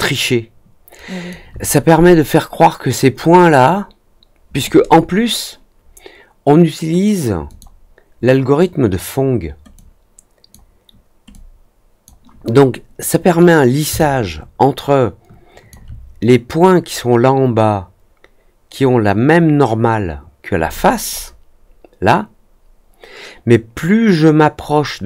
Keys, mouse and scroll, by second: 7.4 click, 9.7-10.4 drag, 11.3-12.0 drag, 13.9-15.6 alt+drag, 20.7 middle click, 21.0 middle click.